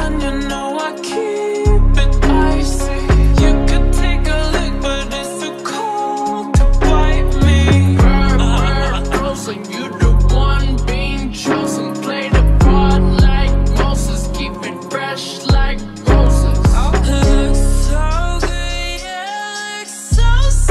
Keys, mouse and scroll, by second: 3.2 ctrl+z, 4.9 ctrl+alt+shift+y, 7.0 ctrl+alt+shift+y, 15.5 alt+[, 17.5 ctrl+shift+d, 18.3 Delete.